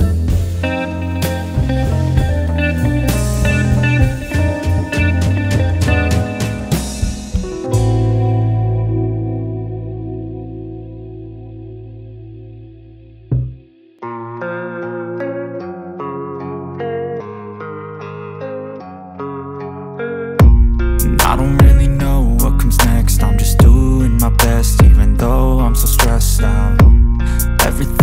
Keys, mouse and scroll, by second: 2.4 click, 4.3 click, 5.2 Return, 6.0 alt+scroll up 1, 6.5-7.8 typing, 6.6 click, 9.3-15.7 alt+drag, 15.7 alt+scroll down 1, 16.7 click, 18.4-27.3 alt+drag, 27.3-27.6 alt+scroll down 1.